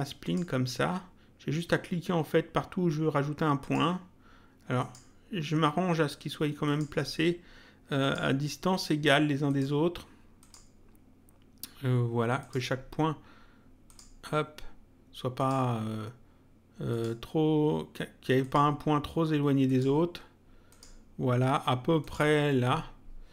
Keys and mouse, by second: 3.6 click, 4.8 click, 6.6 click, 8.0 click, 9.5 click, 12.4 click, 13.8 click, 15.3 click, 16.9 click, 18.4 click, 19.6 click, 22.0 click.